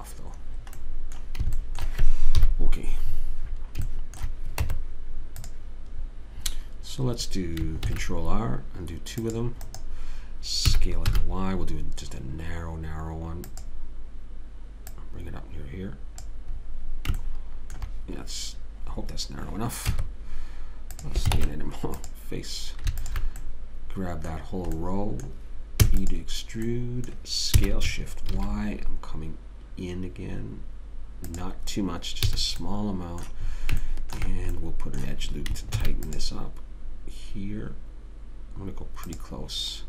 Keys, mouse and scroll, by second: 0.8-1.8 right drag, 1.2 click, 2.7 KP_3, 3.9 middle click, 4.5 middle click, 5.0 Tab, 8.2 ctrl+r, 11.1 s, 15.3 click, 17.0-19.9 middle drag, 20.3 Tab, 21.7 ctrl+Tab, 23.4 click, 26.2 e, 27.9 s, 32.6 a, 32.9 middle click, 36.1 ctrl+r.